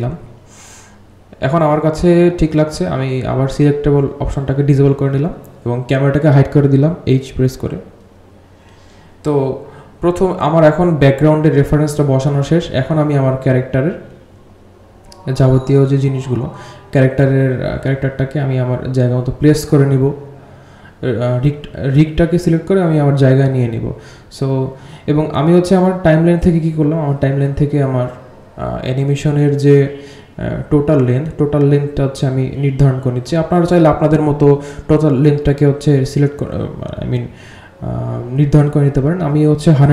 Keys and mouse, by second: 0.6 click, 1.9 click, 2.9 h, 3.8 click, 9.2 click, 9.9 h, 12.6 h, 13.8 click, 15.7 g, 21.2-23.5 drag, 24.6-25.9 drag, 27.6 r, 32.5 click, 33.4-33.9 drag, 35.0 click, 37.2 a.